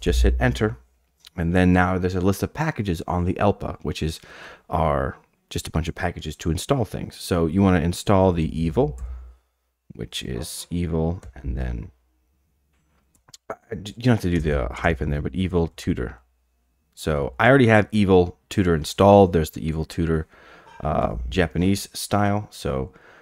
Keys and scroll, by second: 8.1-9.5 typing, 11.2 typing, 13.1 typing, 14.8-17.9 typing.